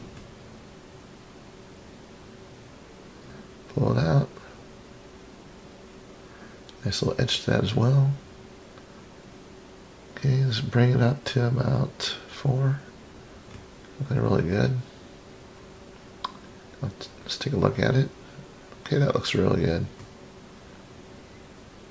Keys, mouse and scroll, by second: 1.6 click, 2.1 scroll up 4, 3.0-6.0 drag, 7.1-8.7 middle drag, 9.7 click, 10.0 click, 10.4 click, 12.6 click, 14.0 click, 16.0-21.9 middle drag.